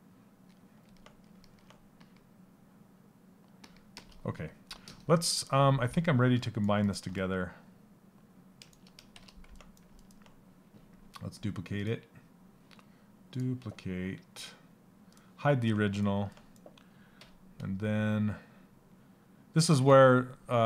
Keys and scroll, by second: 8.7 shift+f.